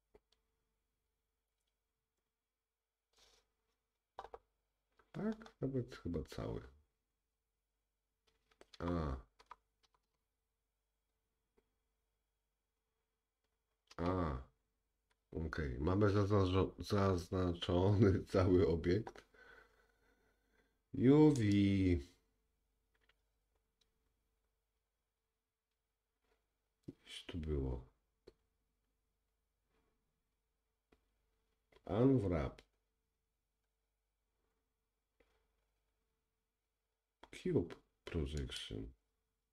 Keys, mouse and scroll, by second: 0.2-2.5 middle drag, 0.8-2.5 scroll down 1, 5.0 middle click, 5.5 middle click, 5.5-6.1 scroll up 2, 8.5 middle click, 8.5 scroll up 1, 9.0 a, 9.8 a, 10.3 a, 12.4 middle click, 14.4 a, 15.6-21.7 middle drag, 21.7-39.5 drag.